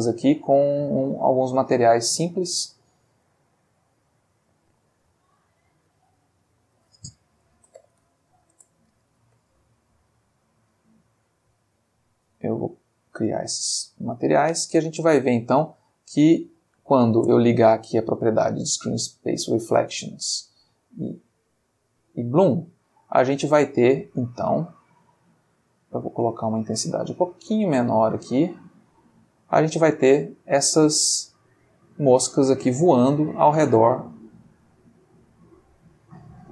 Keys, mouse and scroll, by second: 0.2 click, 2.1 click, 3.2 click, 6.6 click, 7.5-8.0 typing, 8.5 shift+Return, 9.9 click, 10.8 click, 11.4 click, 12.3 click, 13.0 click, 13.8 click, 14.6 space, 17.2 space, 17.6 click, 18.8 click, 20.9 click, 22.4 click, 24.7-26.6 drag, 27.4-29.7 drag, 29.8 space, 33.3 click, 34.0 click, 35.1 click.